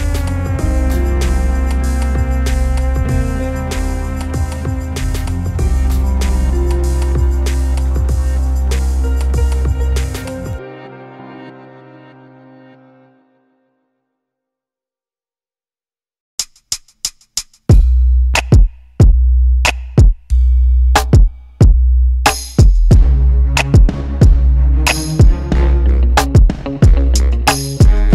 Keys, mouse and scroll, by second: 0.6 click, 2.8 click, 5.9-7.5 drag, 9.9-10.7 drag, 11.5 scroll down 1, 11.7-12.3 scroll up 1, 14.5-23.7 drag, 15.9 scroll up 1, 16.1 scroll down 1, 16.4 scroll up 1, 17.1 scroll down 1, 17.4 KP_0, 19.9 scroll up 1, 20.1 scroll down 1, 21.2-21.7 scroll up 2, 21.7-23.7 scroll down 2, 26.1 scroll up 1, 26.3 scroll down 1, 27.4-28.1 drag.